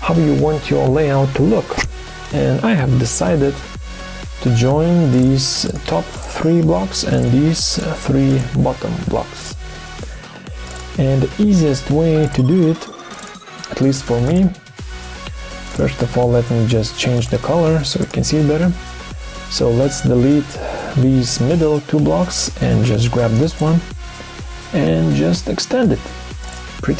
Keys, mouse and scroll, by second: 5.6 shift+click, 6.1 shift+click, 6.2 shift+double click, 7.7 shift+click, 11.8 Delete, 12.5 Delete.